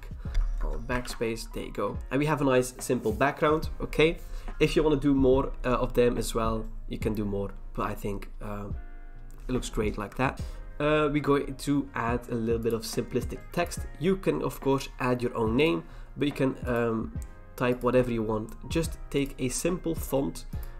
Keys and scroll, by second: 0.6 alt+BackSpace, 1.0 ctrl+d, 10.1 v.